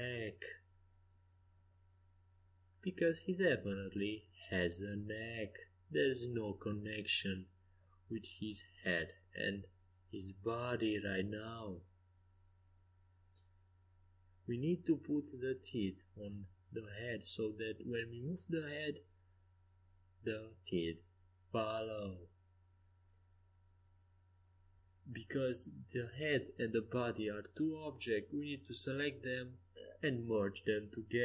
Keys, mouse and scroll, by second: 2.5 ctrl+z, 3.0 ctrl+z, 3.5 ctrl+z, 3.8 ctrl+z, 4.1 ctrl+z, 4.8 Tab, 5.4 ctrl+z, 5.7 ctrl+z, 6.1 ctrl+z, 6.5 ctrl+z, 11.3-15.1 right drag, 15.1-19.3 drag, 18.0-20.7 right drag, 19.3 g, 20.7-21.9 middle drag, 22.7-24.3 right drag, 24.3 middle click, 25.0 right click, 28.0 Tab, 28.8 Tab, 29.8 Tab, 30.2 middle click.